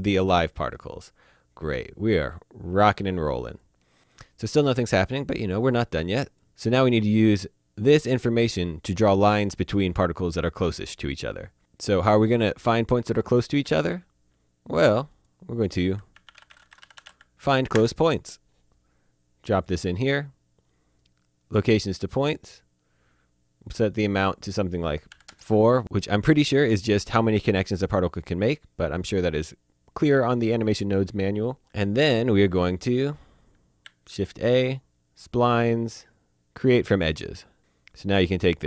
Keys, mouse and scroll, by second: 1.6 click, 2.9 click, 5.5 click, 7.6 click, 13.6 shift+a, 15.1 click, 16.1-17.0 typing, 17.7 Return, 19.5 click, 21.4 click, 23.8 click, 25.0 KP_4, 25.1 KP_Enter, 28.1 click, 30.6 click, 31.6 click, 33.8 a, 36.8 click, 37.6 click.